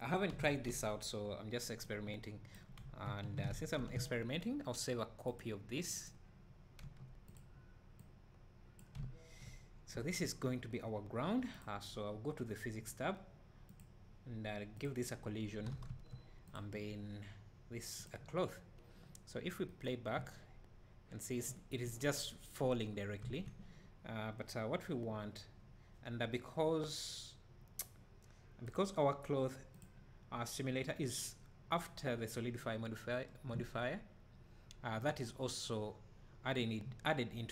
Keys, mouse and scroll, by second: 0.1 scroll, 1.9-3.8 drag, 6.1-6.8 drag, 6.8 s, 8.0-15.5 drag, 15.5 scroll up 1, 15.7 alt+a, 15.9 `, 16.6 click, 19.7-20.2 right drag, 20.2 space, 23.3 Escape, 32.7 click, 33.5 space.